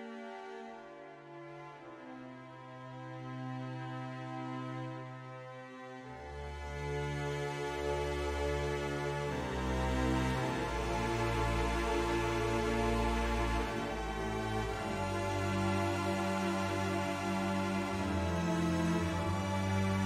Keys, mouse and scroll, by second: 1.1 middle click, 2.9-4.3 drag, 5.7 ctrl+z, 6.7-8.0 drag, 8.2 middle click, 9.4 middle click, 10.0 middle click, 10.9 middle click, 11.8 shift+middle click, 12.6 click, 13.7 middle click, 14.9 middle click, 18.0 click, 19.5 click.